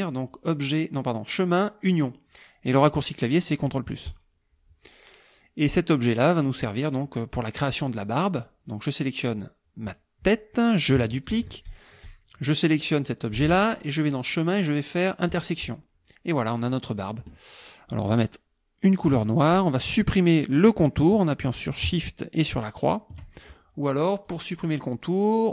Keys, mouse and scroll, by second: 0.3 click, 4.1 click, 8.3 click, 11.3 ctrl+d, 12.4 shift+click, 14.1 click, 15.3 click, 19.1 click, 22.6 shift+click, 24.3 click.